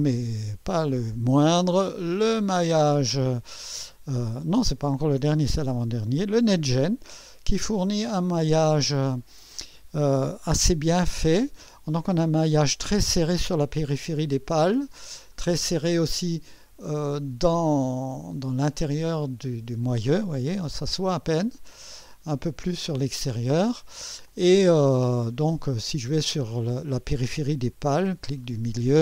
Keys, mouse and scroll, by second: 1.5 click, 7.1 scroll up 2, 7.9-8.8 right drag, 15.3-16.1 drag, 17.9-19.3 drag, 20.2 click, 21.4 scroll up 1, 23.6 scroll down 1, 24.3-25.9 drag, 26.1 right click, 28.2 middle click.